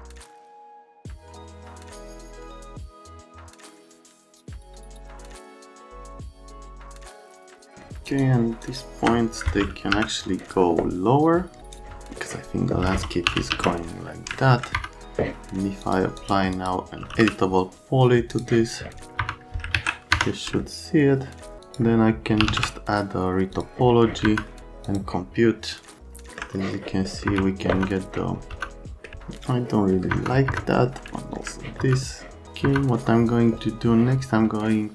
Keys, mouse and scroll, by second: 0.5 F3, 0.8 BackSpace, 1.4 click, 1.6 middle click, 1.7 F3, 1.7 middle click, 2.1 click, 2.4 click, 2.7 click, 3.0 middle click, 3.1 right click, 3.4 click, 3.9 F3, 4.6 right click, 4.8 F3, 5.0 click, 5.2 click, 5.4 click, 5.6 middle click, 5.8 click, 6.2 1, 6.6 click, 7.4 middle click, 7.6 click, 8.1 ctrl+click, 8.6 ctrl+click, 9.9 c, 11.6 click, 13.0-14.0 typing, 14.3 alt+middle click, 14.8 F3, 15.8 click, 16.2 click, 16.5 click, 16.7-17.7 typing, 18.3 click, 18.4 right click, 19.2 F3, 19.7 alt+q, 20.1 F3, 20.6 alt+middle click, 21.6 click, 22.2-23.0 typing, 23.5 click, 24.2 F3, 24.5 middle click, 24.8 click, 26.0 alt+middle click, 26.6 middle click, 27.1 middle click, 27.3 F3, 27.7 F3, 28.5 F3, 29.1 middle click, 30.1 F3, 30.5 F3, 31.1 alt+right click, 31.6 right click, 31.8 F3, 32.6 F3.